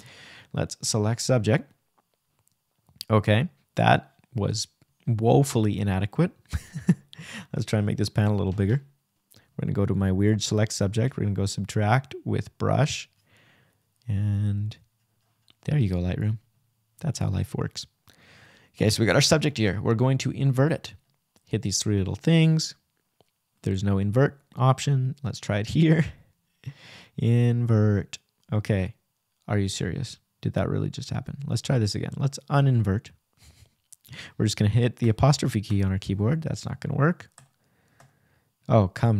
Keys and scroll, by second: 27.8 ', 30.1 ', 32.9 '.